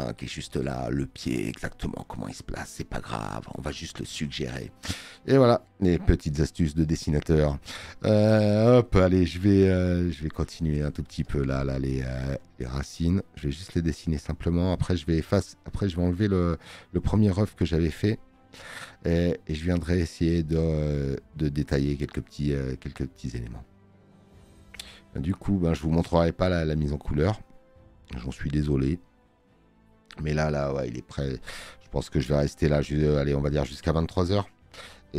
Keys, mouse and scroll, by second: 8.1 space, 10.7 space, 10.9 click.